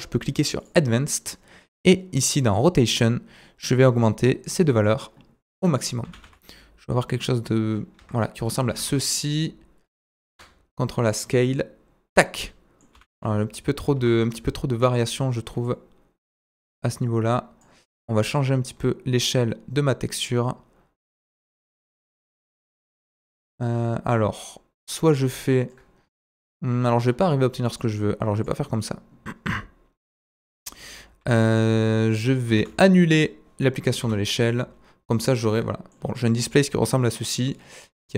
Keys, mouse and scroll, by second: 0.8-2.5 drag, 1.6-2.5 scroll down 2, 2.7 click, 3.6 click, 4.4 click, 5.6 middle click, 6.2 s, 8.9 s, 9.8 middle click, 10.3 ctrl+a, 10.3-10.8 ctrl+drag, 11.7-12.3 drag, 12.1 middle click, 13.1 s, 14.8 click, 15.6 click, 18.3 click, 22.5 shift+click, 26.4-28.4 middle drag, 27.0-27.5 scroll up 1, 27.5-27.8 scroll down 1, 28.4-30.2 drag, 31.2 ctrl+z, 31.9 ctrl+z, 32.0-32.3 scroll up 1, 32.3 scroll down 1, 33.3 ctrl+z, 33.6 middle click, 34.7 ctrl+z, 35.3-36.5 right drag, 35.5 middle click, 36.0-36.5 scroll up 2, 36.5-38.1 drag, 37.5-38.1 middle drag, 37.5-38.1 right drag.